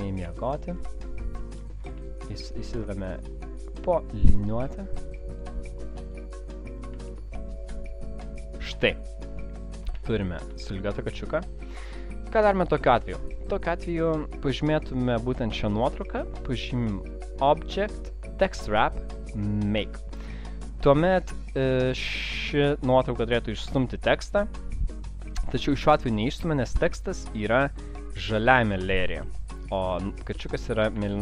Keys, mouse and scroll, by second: 0.2 alt+scroll down 1, 1.6 click, 1.6 alt+scroll up 1, 1.6 space, 2.1 alt+scroll up 1, 2.1 space, 2.5 click, 7.0 click, 8.5 shift+click, 9.4 alt+scroll down 1, 10.0 space, 10.7 click, 11.3 space, 11.7 click, 11.7 alt+scroll down 1, 14.3 click, 17.3 click.